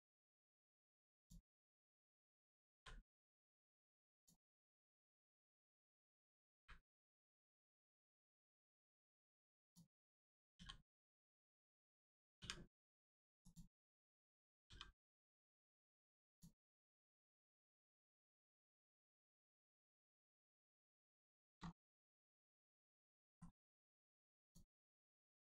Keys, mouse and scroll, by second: 1.1 click, 2.6 click, 2.7 l, 4.1 click, 5.0 right click, 6.5 u, 7.7 click, 12.3 u, 13.3 click, 14.6 g, 15.5 click, 16.6 middle click, 17.4 shift+middle click, 17.7 middle click, 17.8 middle click, 18.3 shift+middle click, 20.2 click, 21.3-21.7 scroll up 2, 21.8 shift+middle click, 22.1 scroll up 1, 22.9 click, 23.1 shift+middle click, 24.4 click.